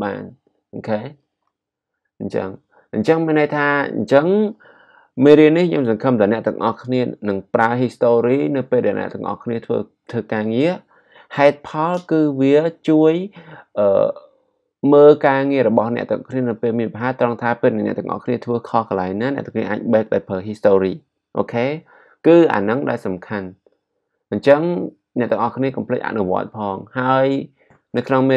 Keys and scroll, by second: 1.2 alt+super+z.